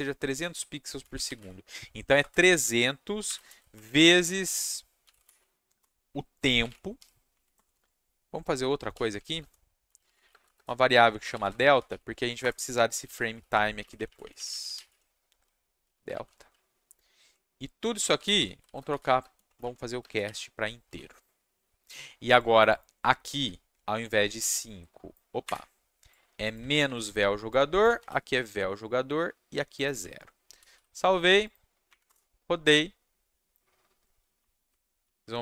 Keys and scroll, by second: 0.7-7.4 typing, 5.8 Return, 7.5 Return, 7.7 Tab, 8.6-13.8 typing, 12.4 Return, 13.9 Left, 14.0 Left, 14.2 Left, 14.3 Left, 14.5 Left, 15.6-20.2 typing, 19.6 Left, 20.8 ctrl+s, 24.0 ctrl+c, 25.4 Escape, 26.8 ctrl+v, 28.0 ctrl+v, 30.5 ctrl+s, 31.9 Up, 32.0 Return, 34.4 Up, 34.5 Up, 35.0-35.4 typing.